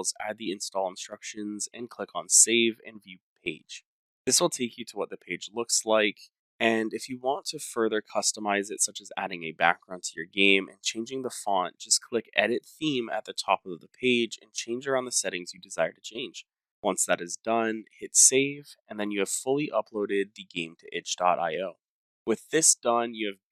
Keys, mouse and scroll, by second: 0.5 click, 1.1-2.5 scroll, 2.7 click, 3.8-4.1 scroll, 4.4 click, 8.4-8.8 scroll, 9.0-10.1 scroll down 21, 10.1-11.3 scroll, 12.2 click, 15.5 click, 15.5 scroll down 10, 15.9 click, 16.4 click, 16.5 click, 17.6 click, 18.6 click, 20.0 click, 21.4 click, 22.0 scroll down 3, 22.6 click, 23.3 scroll.